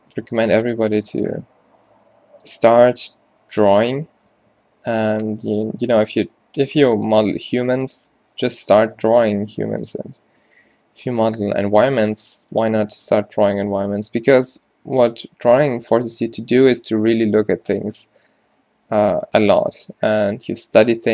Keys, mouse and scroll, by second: 2.2 g, 3.1 g, 6.4 g, 7.3 g, 8.0 click, 9.2 g, 10.1 Tab, 10.7 Tab, 13.5 g, 15.8 g, 16.3 Tab, 17.6 Tab, 19.8 z, 20.4 z, 21.0 q.